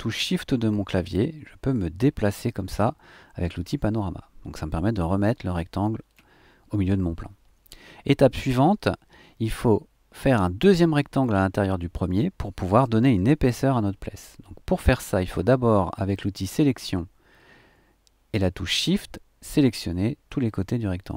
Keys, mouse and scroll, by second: 15.8 click, 18.8 click.